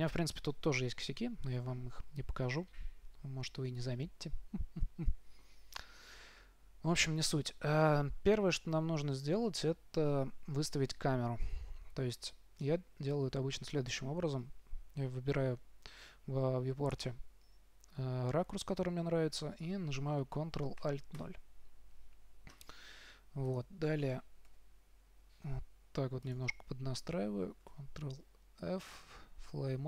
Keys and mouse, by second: 3.9-14.8 middle drag, 21.5 ctrl+alt+KP_0, 24.8 g, 27.8 shift+f.